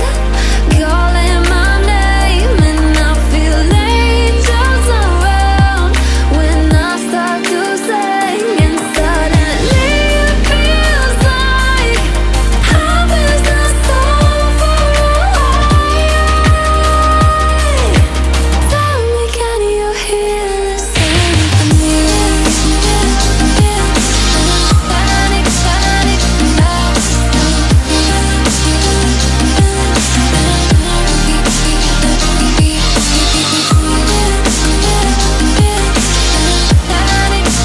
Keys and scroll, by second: 32.5 ctrl+a.